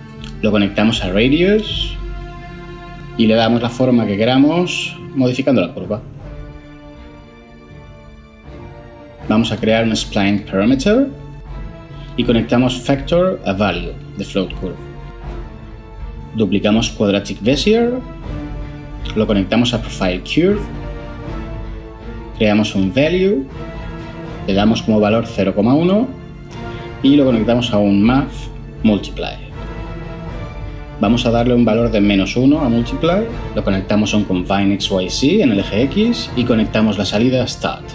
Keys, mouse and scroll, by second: 10.2 ctrl+shift+a, 10.3-10.8 typing, 17.1 shift+d, 22.5 ctrl+shift+a, 23.1 typing, 26.0 End, 26.1 BackSpace, 26.3 1, 26.8 Return, 29.0-29.5 typing, 32.5-34.4 typing.